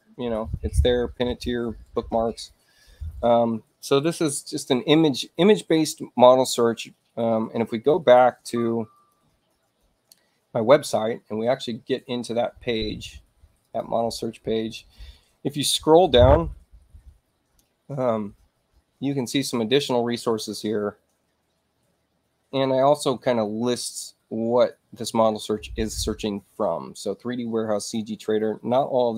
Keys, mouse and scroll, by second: 8.8 click, 13.5 click, 16.3 middle click.